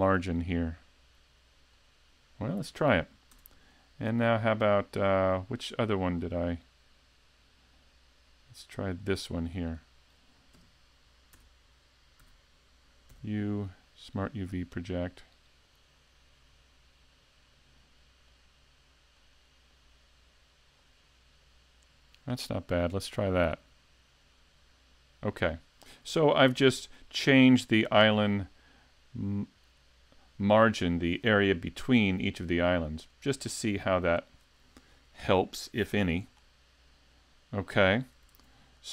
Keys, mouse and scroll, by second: 0.2 click, 3.3 Tab, 6.2 click, 9.6 right click, 11.4 Tab, 12.2 a, 13.1 u, 18.4 click, 26.1 Tab, 28.4 middle click, 38.3 s.